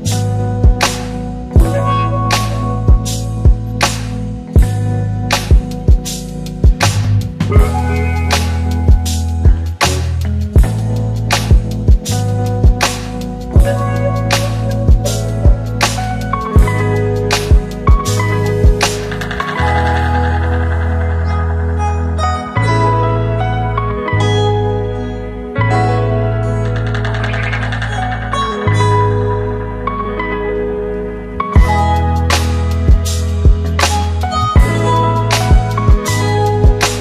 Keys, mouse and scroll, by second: 3.8 click, 6.2 right click, 8.1 click, 9.9 click, 10.2 shift+click, 12.5 r, 13.4-14.6 click, 16.9 click, 17.5 s, 18.1-21.8 click, 22.8 Return, 30.0 click, 33.0-34.6 click.